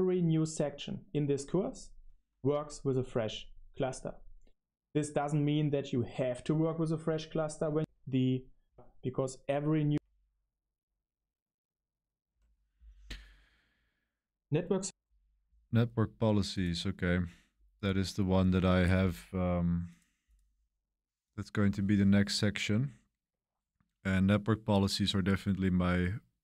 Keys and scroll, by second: 7.7 space, 8.6 space, 9.9 space.